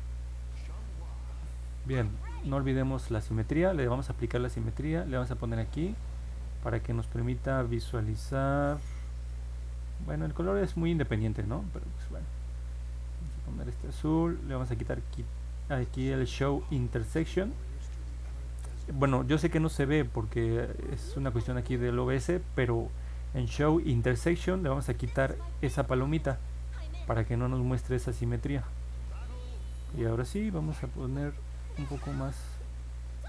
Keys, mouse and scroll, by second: 13.1 click, 31.6 click, 32.0 click, 32.9 click.